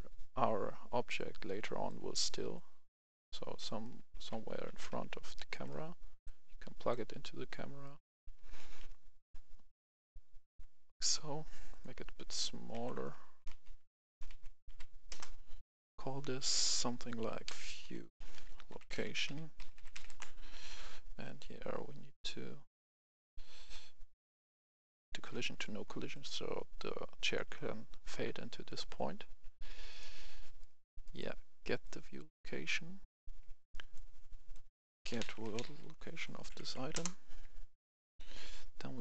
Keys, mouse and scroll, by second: 1.2-3.8 drag, 3.8 right click, 4.0-5.8 typing, 6.2-7.5 drag, 7.8 right click, 8.0 a, 8.3 d, 8.6 w, 9.9 click, 13.0 3, 13.2 Tab, 13.7 3, 14.0 Tab, 14.7 3, 15.1 Return, 15.6 click, 15.6 F10, 16.4 click, 16.7 F2, 17.4-19.9 typing, 20.0 Return, 21.5 scroll down 1, 23.5-24.6 drag, 30.6 right click, 31.8 click, 33.0 F10, 33.9-34.9 drag, 35.0-35.8 typing, 36.3 Up, 36.5 Up, 36.7 Up, 36.9 Return, 38.9 click.